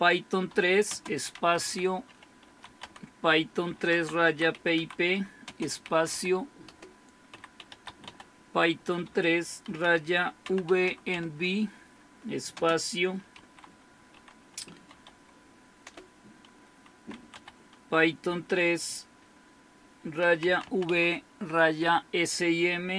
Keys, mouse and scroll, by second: 0.0-18.5 typing, 19.8-21.8 typing.